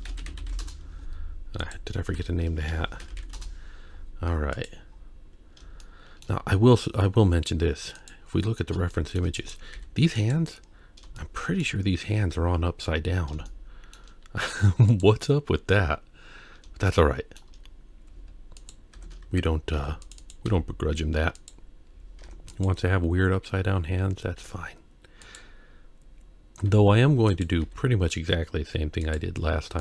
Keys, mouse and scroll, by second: 1.6 click, 2.1 F2, 4.5 click, 4.9-5.6 scroll up 2, 5.8-6.3 shift+middle drag, 6.7-7.2 scroll down 2, 8.0 click, 8.5-8.9 scroll down 2, 8.9 shift+middle click, 9.4 click, 9.8 g, 10.6-11.0 scroll up 3, 11.2-11.6 shift+middle drag, 12.9-13.5 scroll down 1, 13.5-14.0 shift+middle drag, 13.5-13.9 scroll down 1, 14.9 click, 16.1-16.5 scroll up 2, 16.9-17.4 shift+middle drag, 17.7-18.1 scroll up 2, 18.6 click, 18.9 Tab, 19.8 ctrl+r, 20.5 g, 22.2 Tab, 22.5 click, 24.4 g, 27.1 s, 27.8 g.